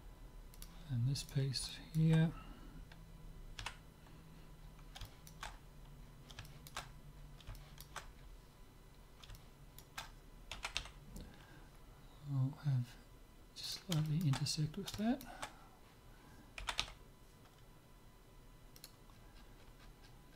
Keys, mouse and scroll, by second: 0.5-1.9 drag, 1.3 right click, 1.9-3.4 middle drag, 3.6 KP_7, 4.6-11.3 middle drag, 10.5 g, 14.1-17.6 middle drag, 16.8 g, 19.1-20.3 middle drag, 19.1-20.1 scroll down 1, 20.1-20.3 scroll down 1.